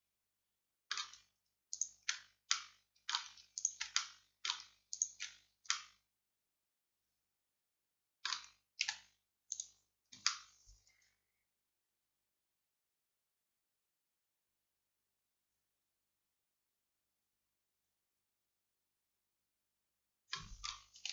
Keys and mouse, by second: 8.9 x, 10.3-21.1 drag.